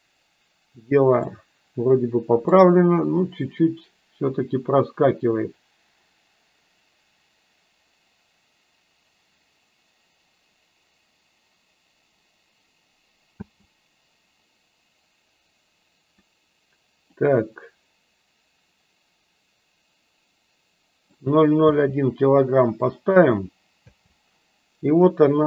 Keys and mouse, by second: 1.5-2.9 middle drag, 13.4 space, 17.1-21.1 drag, 21.5 space, 23.9 space.